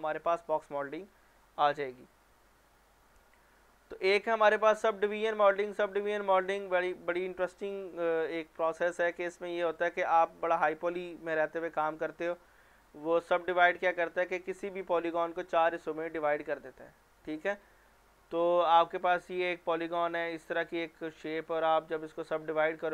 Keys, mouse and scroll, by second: 2.7 click, 5.1 click, 12.7 click.